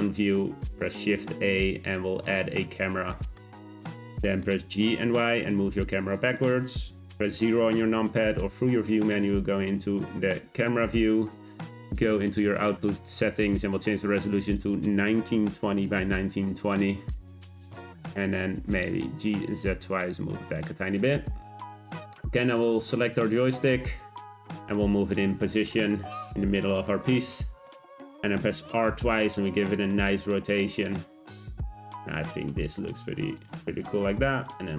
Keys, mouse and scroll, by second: 0.4 shift+a, 3.1-3.4 middle drag, 3.4-4.0 scroll down 7, 4.2-4.6 middle drag, 4.6 g, 7.7 `, 11.8 click, 14.4-16.9 drag, 16.9-17.3 scroll down 1, 18.1 click, 18.7 g, 21.8 drag, 24.2 g, 25.5 g, 28.8 r, 33.5 g.